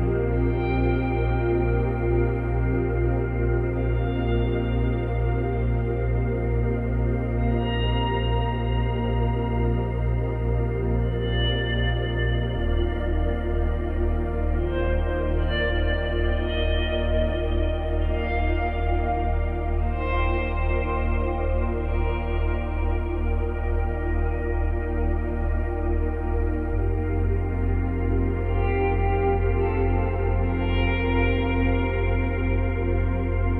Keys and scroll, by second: 7.6 space, 9.3 space, 10.7 space, 15.2 space, 16.2 space, 22.0 Delete, 22.5 space, 23.8 space, 25.4 space, 26.3 space, 28.3 ctrl+z.